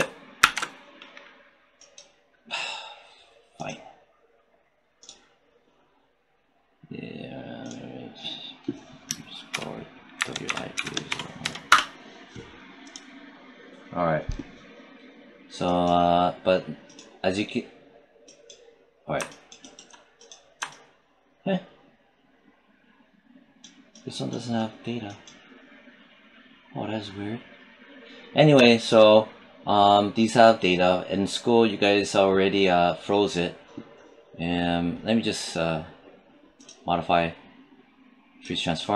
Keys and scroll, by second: 0.2 ctrl+alt+s, 9.4-11.3 typing, 11.5 Return.